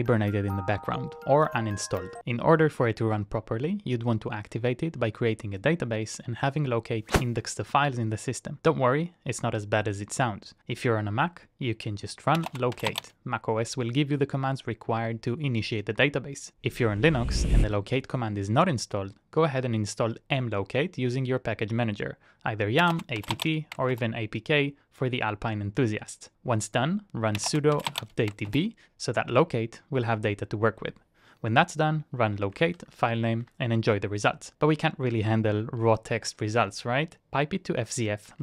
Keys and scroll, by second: 32.1-33.1 typing, 34.1 Return, 37.7-38.4 typing.